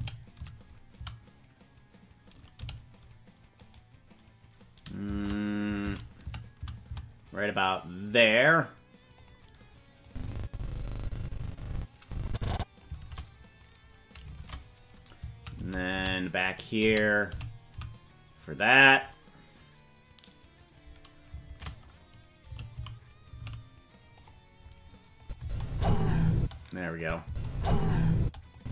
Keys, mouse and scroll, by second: 5.1 shift+`, 10.1-13.1 drag, 13.0 shift+`, 14.3 shift+`, 21.5 shift+`, 25.2 click, 25.4 space, 26.3 space, 27.0 click, 27.2 space, 28.2 space, 28.5 click.